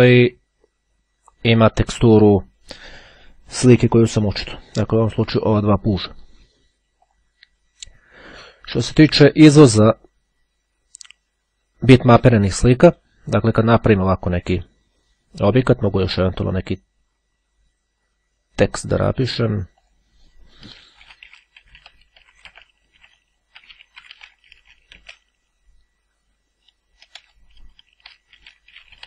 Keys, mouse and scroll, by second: 6.5-7.6 drag, 7.8-8.3 scroll down 2, 8.3-10.8 scroll down 1, 18.9 click, 20.0 click, 20.7-25.5 typing, 25.7 Return, 27.8-29.0 typing.